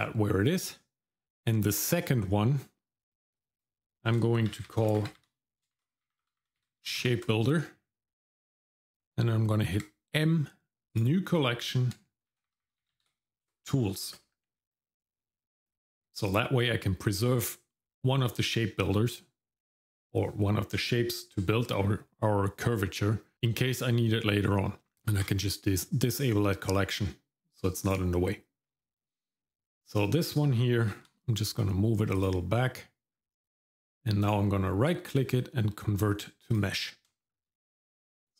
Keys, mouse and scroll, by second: 3.4 click, 3.6-7.1 drag, 9.8 m, 12.6 shift+o, 25.2 click, 27.8 click, 29.6 shift+middle click, 32.2 g, 32.5 middle click, 33.1-33.9 scroll up 1, 34.2-37.1 right drag, 37.1 shift+middle click.